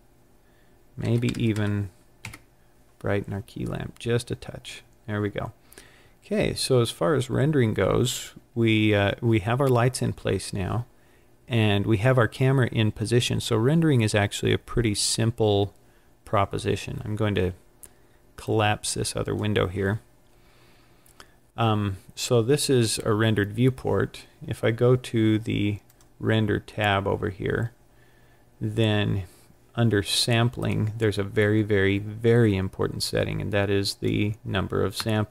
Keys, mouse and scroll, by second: 1.4 KP_0, 5.7 scroll up 1, 7.0 scroll up 1, 18.3 click, 18.6 click, 21.7 scroll down 1, 25.8 click, 30.5 click, 33.1 click.